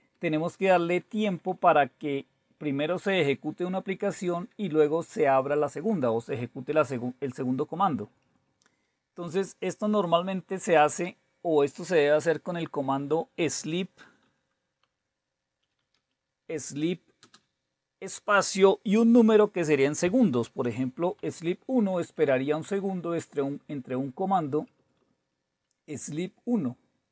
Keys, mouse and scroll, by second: 0.1 Down, 0.3 Down, 0.4 Down, 1.0 Up, 1.2 Up, 1.4 Up, 1.6 Up, 3.6 Down, 3.8 Down, 4.0 Down, 8.0 Up, 8.4 Up, 10.7 Down, 14.0-17.1 typing, 21.2 1, 21.9 Up, 22.6 Return, 24.5 Down, 24.8 Right, 25.0 Right, 25.5 Delete.